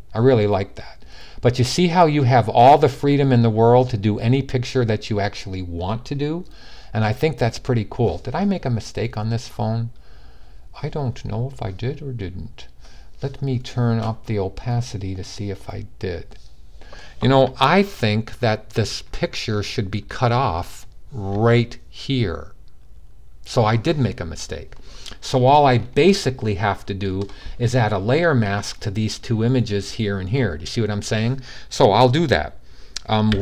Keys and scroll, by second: 33.0 p.